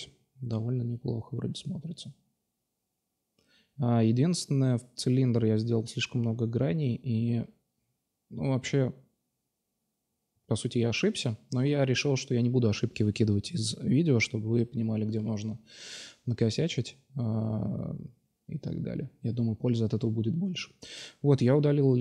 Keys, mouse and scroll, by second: 1.1 middle click, 3.6 click, 4.7-6.5 drag, 8.5-10.5 drag, 11.6 KP_Divide, 13.3-14.5 right drag, 14.5 x, 14.9-15.2 drag, 14.9-15.2 right drag, 16.2-17.1 drag, 18.6-19.4 drag, 20.0 x, 21.9 Tab.